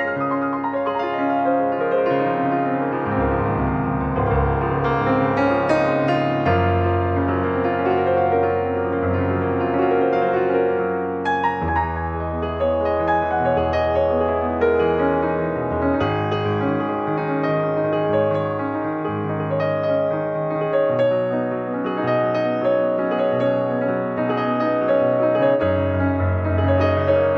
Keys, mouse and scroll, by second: 3.0-3.4 scroll down 1, 3.4 middle click, 4.0 click, 4.1 scroll down 1, 4.2 middle click, 5.1 click, 6.0 click, 6.8 click, 8.3 middle click, 8.4-8.9 scroll up 2, 8.9 click, 9.4-11.3 drag, 11.7 click, 11.8 scroll down 2, 12.0-14.2 middle drag, 14.2 scroll up 1, 14.4-15.5 shift+middle drag, 15.5 scroll up 1, 15.7 shift+middle click, 16.2 click, 16.9 click, 18.7-21.2 drag, 23.7 click, 24.0-24.3 scroll up 2, 24.3 shift+middle click, 25.2 shift+scroll down 2, 25.4 shift+middle click, 25.9 ctrl+s, 26.2 alt+middle click, 26.5 alt+middle click, 26.9 alt+middle click.